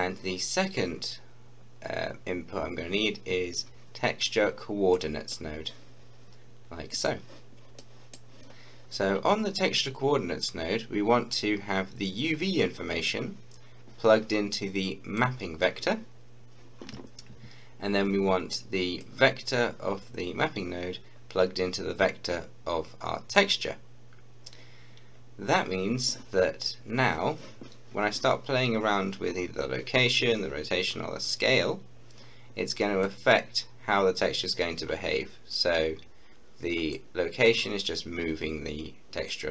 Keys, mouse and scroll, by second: 4.9-7.0 drag, 7.8-10.5 middle drag, 13.1 middle click, 13.2-19.0 drag, 19.0-25.7 drag, 26.4 click, 26.5-27.0 scroll up 1, 27.0-27.5 scroll down 1, 33.1-39.5 drag.